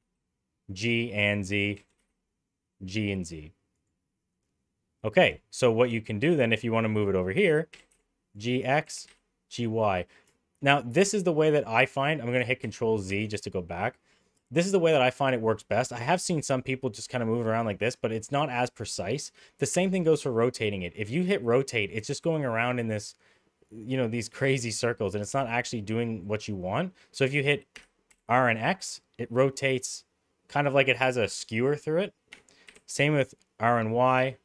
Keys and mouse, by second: 1.7 g, 7.7 g, 8.8 g, 12.6 ctrl+z, 13.0 ctrl+z, 16.0 g, 19.7 r, 27.7 r, 32.6 r.